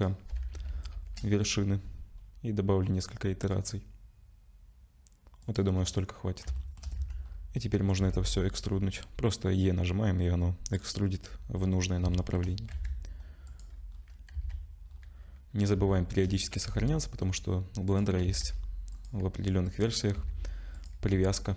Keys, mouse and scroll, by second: 0.9 ctrl+shift+b, 6.6 shift+middle click, 7.0 a, 7.2-7.8 scroll up 2, 8.0-9.6 scroll up 1, 8.0 e, 11.0-11.6 scroll down 2, 11.6-12.0 scroll down 6, 12.1 shift+middle click, 12.7 Tab, 13.5 click, 13.9 scroll up 2, 14.4 ctrl+s, 14.8-15.2 scroll up 4, 15.9 shift+middle click, 16.6 g, 18.2 s, 19.2 g, 20.1 s, 20.9 g.